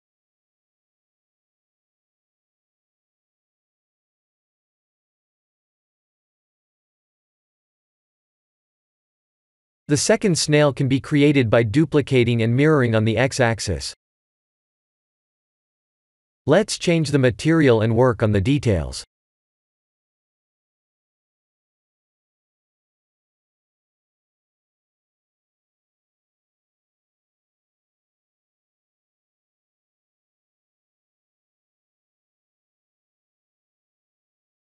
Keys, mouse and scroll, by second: 0.5 click, 1.3 middle click, 2.6 middle click, 4.5-5.8 scroll down 11, 6.4 scroll down 2, 6.6 click, 8.3-9.9 scroll up 19, 10.8 click, 11.6-12.2 scroll up 4, 12.8 click, 14.0 click, 15.1 click, 15.9 click, 19.1 click, 20.5 click, 21.5 click, 23.0 click, 24.4 click, 25.8 shift+click, 27.8 click, 29.2 click, 30.0 click, 31.3 click.